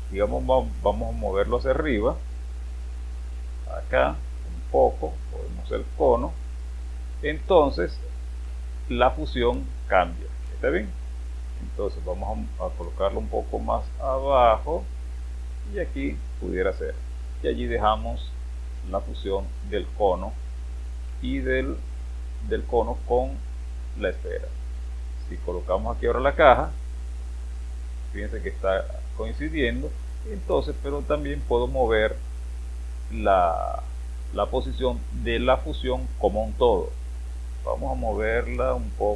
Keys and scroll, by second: 26.0 space.